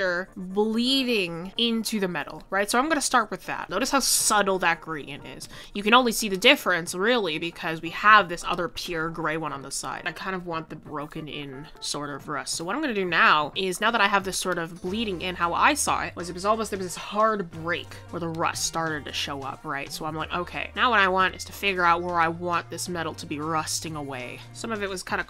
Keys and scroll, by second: 9.3 ctrl+z, 11.0 ctrl+z.